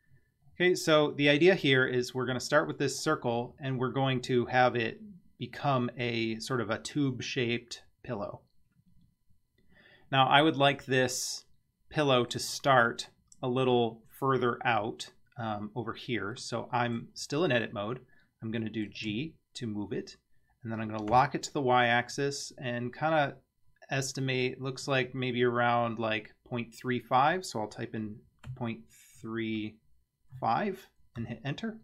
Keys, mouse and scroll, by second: 0.5-1.0 scroll up 8, 3.0 scroll down 4, 10.0 scroll down 2, 10.8-12.4 middle drag, 16.4-17.0 middle drag, 18.2-18.6 scroll up 1, 18.6 middle click, 19.1 g.